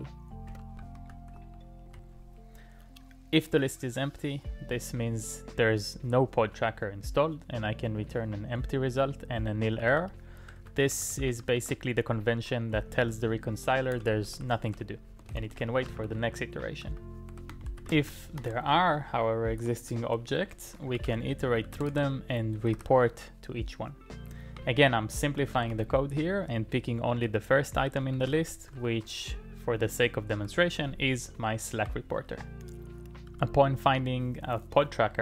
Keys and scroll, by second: 0.5 Tab, 0.7-2.4 typing, 0.9 alt+i, 9.6-12.1 typing, 14.0-19.1 typing, 19.5 Return, 20.3-22.8 typing, 24.3-29.3 typing, 30.5-33.9 typing.